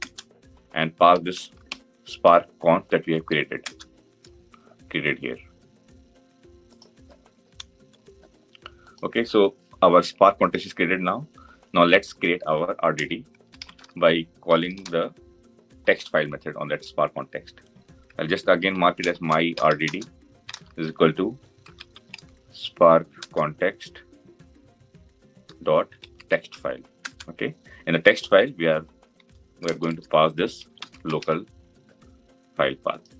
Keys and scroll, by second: 23.0 Return.